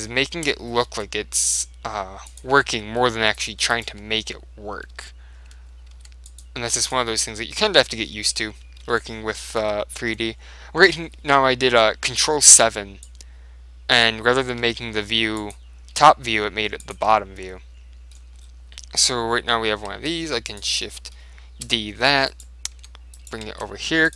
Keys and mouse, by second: 0.3 right click, 1.0 ctrl+r, 2.5 click, 3.5 right click, 4.3-5.7 right drag, 5.0 f, 6.0 ctrl+r, 7.0 click, 7.2-8.4 middle drag, 8.9 ctrl+l, 13.1 click, 14.7 r, 15.6-18.7 drag, 16.1 g, 17.2-20.4 middle drag, 20.0 shift+d, 20.9-22.8 middle drag, 22.1 Tab, 22.4-24.1 right drag, 22.9 Tab, 23.6 shift+s.